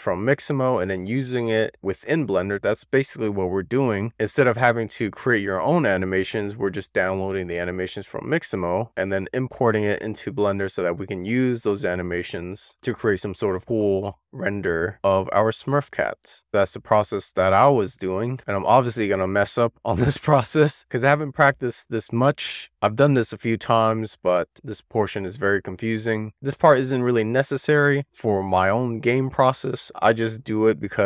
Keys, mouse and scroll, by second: 1.4-3.9 middle drag, 4.4-5.4 scroll up 1, 5.4-6.2 scroll down 1, 6.2-7.3 scroll up 1.